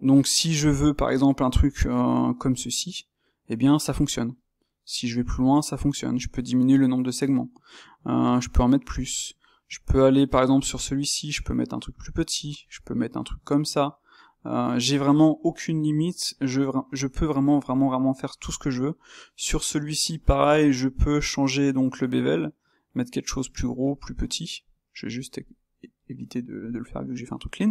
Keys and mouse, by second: 18.4 click, 21.0 space, 25.9-27.7 middle drag.